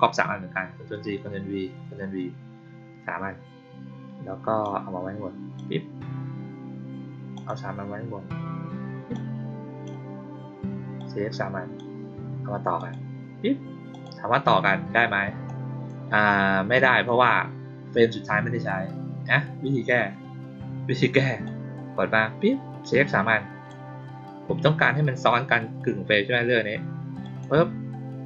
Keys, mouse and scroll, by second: 4.5-5.5 drag, 7.3 click, 9.0-9.8 drag, 10.9-11.7 drag, 12.7 click, 13.8 click, 15.4-15.8 drag, 21.4-23.6 drag, 27.2 click.